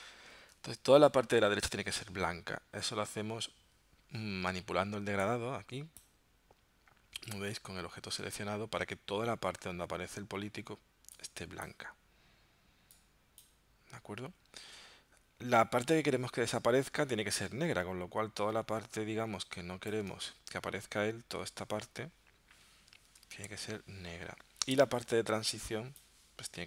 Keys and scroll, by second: 0.5 super+Tab, 20.2 super+Tab, 23.1 super+Tab.